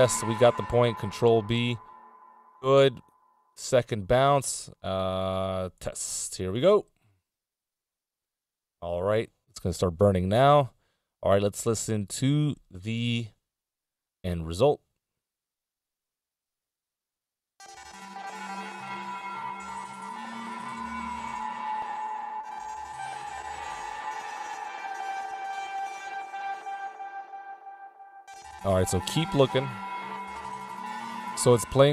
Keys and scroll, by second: 0.9 ctrl+b, 6.9 Return, 26.4 z.